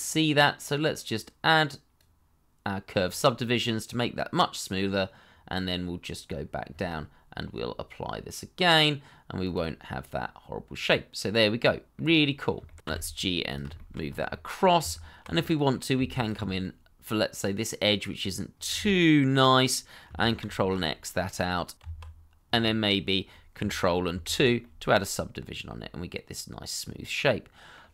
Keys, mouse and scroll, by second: 2.9-3.2 scroll down 1, 3.2 middle click, 7.0-7.6 scroll down 1, 10.1 middle click, 12.6 shift+middle click, 12.8 y, 12.8 x, 13.7 shift+middle click, 14.0 scroll up 1, 14.3 middle click, 14.8 Tab, 15.4 middle click, 16.2 alt+click, 16.6 middle click, 19.3 scroll up 1, 20.4 ctrl+x, 21.2 middle click, 21.7 Tab, 22.8-23.3 scroll down 1, 23.3 middle click, 24.1 ctrl+2, 24.6 middle click.